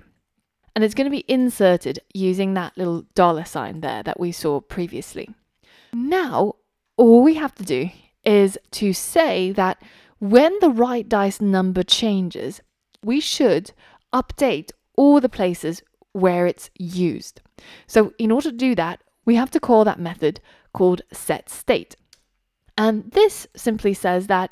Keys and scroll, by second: 22.2 Return.